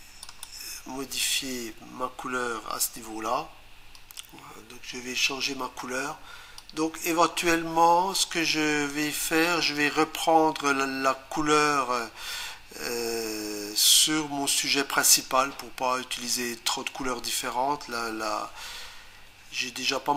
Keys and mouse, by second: 0.2 click, 6.6 click.